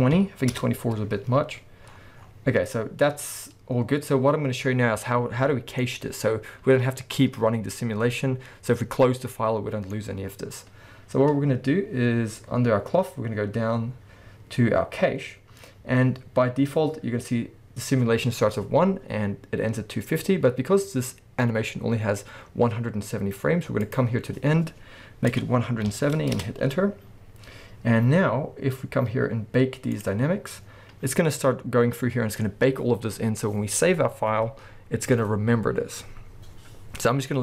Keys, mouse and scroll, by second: 0.6 Return, 1.9-2.9 scroll up 1, 5.6 scroll down 1, 5.8-23.8 middle drag, 6.3-8.2 scroll up 2, 8.2-9.3 scroll up 1, 13.0-13.6 scroll down 2, 13.6-15.8 scroll down 1, 15.8-18.4 scroll down 1, 23.8-37.4 drag, 26.4 Return, 28.1-29.6 scroll down 2, 29.6-29.9 scroll down 1.